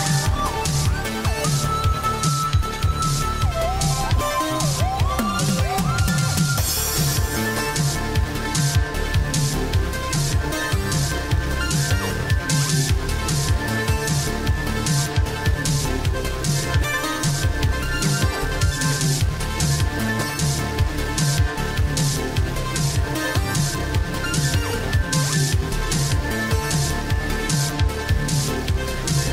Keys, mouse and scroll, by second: 1.9 Delete, 2.8 right click, 5.7 Return, 8.6 click, 8.9 Delete, 9.5 right click, 12.0 BackSpace, 13.2 Down, 14.1 Return, 15.8 click, 23.3-24.7 typing, 23.9 click, 24.3 click, 25.4 click.